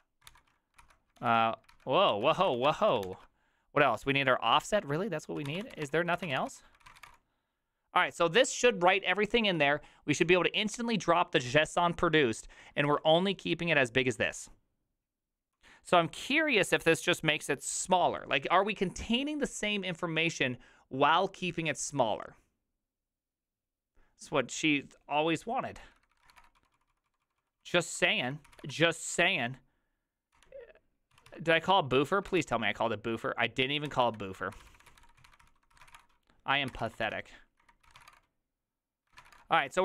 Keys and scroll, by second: 0.0-0.3 typing, 0.8 ctrl+c, 1.2 ctrl+h, 1.7 ctrl+c, 2.1 ctrl+o, 2.4 ctrl+c, 2.6 a, 3.1 ctrl+h, 5.2-7.5 typing, 9.3-10.0 typing, 14.1 ctrl+u, 14.1-15.9 typing, 26.0-29.1 typing, 30.4-32.9 typing, 34.3-39.8 typing, 39.1 ctrl+c.